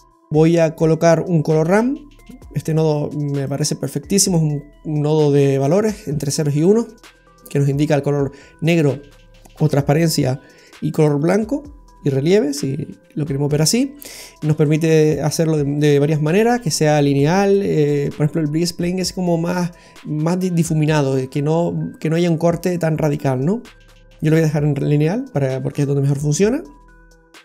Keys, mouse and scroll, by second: 3.9 scroll up 1, 5.1-6.1 scroll up 3, 15.0 click, 23.1 click, 24.9 scroll up 2, 25.2-26.3 scroll down 4.